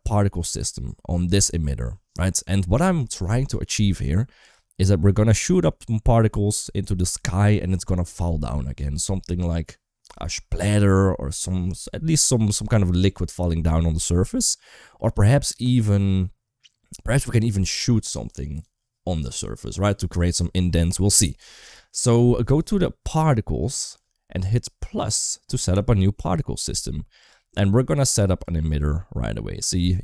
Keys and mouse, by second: 5.2 middle click, 14.6 middle click, 23.5 click, 24.8 click, 28.2 space, 29.4 space.